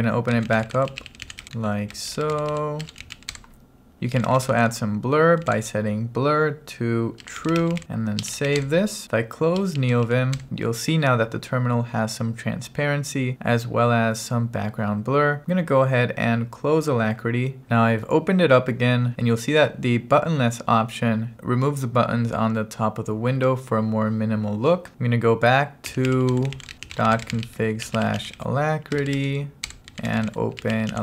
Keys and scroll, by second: 0.0-5.7 typing, 7.0-10.1 typing, 25.7-31.0 typing, 29.7 Return.